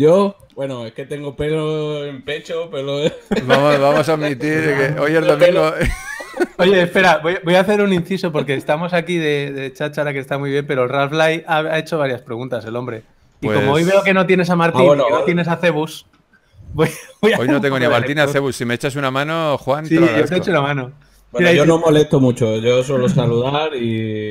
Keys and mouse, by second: 0.9 z.